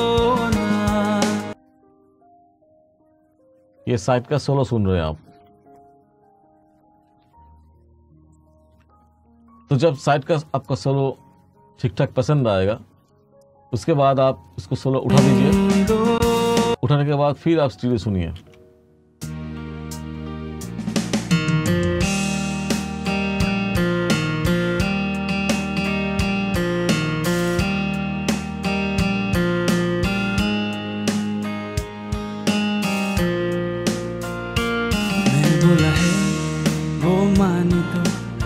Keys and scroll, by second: 16.2 space, 18.5 space, 30.1-31.7 typing.